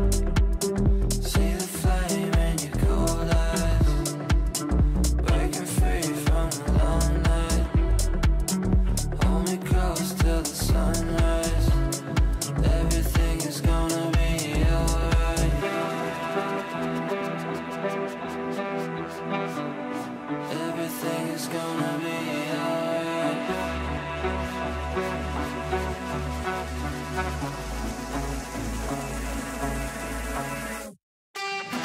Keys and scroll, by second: 22.0 Right.